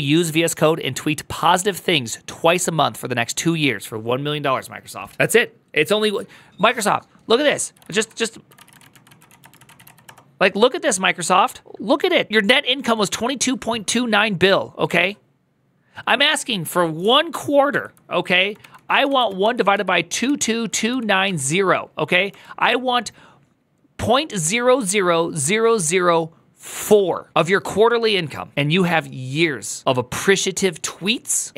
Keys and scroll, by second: 7.5 alt+h, 7.7 ctrl+t, 8.0-10.1 typing, 11.4-12.1 typing, 17.5 ctrl+t, 18.1-21.0 typing, 22.1 Return.